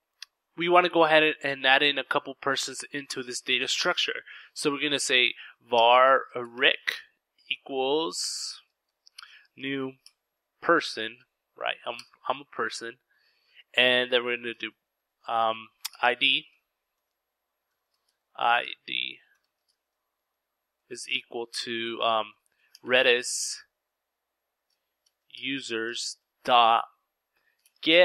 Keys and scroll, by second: 2.3 Return, 2.3 typing, 3.3-5.5 typing, 7.3-8.4 typing, 9.8 Down, 10.4 Return, 12.4-12.9 typing, 13.3 Left, 14.1-14.9 typing, 15.4 Return, 16.2-17.7 typing, 19.2 typing, 20.4-21.7 typing, 23.3-28.0 typing.